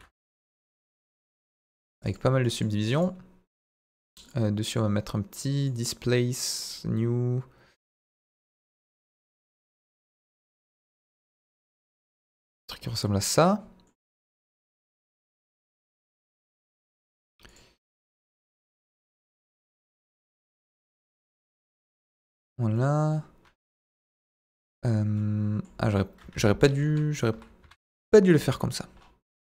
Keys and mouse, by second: 0.4 Tab, 0.8 right click, 1.2 click, 1.3 right click, 2.4 right click, 2.8 right click, 3.7 Tab, 5.6 click, 6.6 click, 7.8 click, 8.4 click, 10.4-12.6 drag, 12.8-13.8 middle drag, 15.5 ctrl+a, 15.9 middle click, 16.2 Tab, 16.8 Tab, 17.2 right click, 17.8-18.1 middle drag, 18.4 z, 18.8-19.4 middle drag, 20.5 KP_1, 21.0 s, 21.2 z, 21.9 click, 22.7 middle click, 23.6 KP_1, 23.9 KP_3, 24.5 Tab, 25.1 middle click, 26.2 Tab, 26.9 KP_Divide, 27.3 KP_1, 27.6 KP_3, 28.5 Tab.